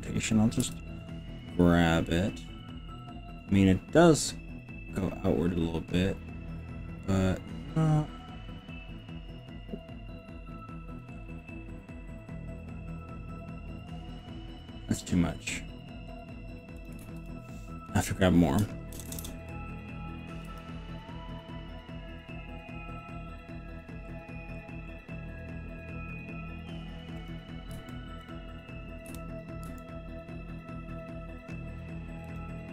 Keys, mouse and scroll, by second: 0.7 g, 7.8-9.2 scroll down 7, 9.4-10.2 scroll up 6, 10.8-11.2 scroll up 3, 11.2-11.8 scroll down 2, 14.0-14.4 scroll down 3, 14.8-15.4 scroll up 4, 16.2 scroll down 1, 16.8 click, 17.2 ctrl+z, 19.0 ctrl+KP_Add, 19.2 ctrl+KP_Add, 19.2 ctrl+KP_Add, 20.5 g, 24.2 scroll down 2, 24.6-25.2 scroll up 5, 27.2 click, 27.8 r, 28.4 click, 29.1 KP_7, 29.8 r, 32.4 click.